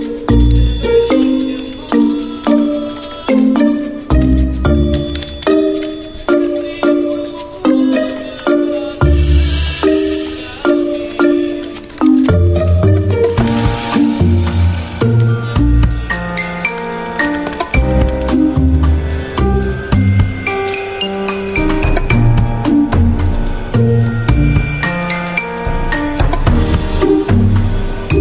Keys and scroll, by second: 2.6 d, 3.6 x, 5.4-7.4 typing, 8.3 ctrl+a, 9.2 Caps_Lock, 9.7-10.5 typing, 11.4 Escape, 16.5 t, 17.1 ctrl+a, 18.3-19.0 typing, 19.0 Escape, 21.1 typing, 22.3 alt+Left, 22.4 alt+Left, 22.7 alt+Left, 22.9 alt+Left.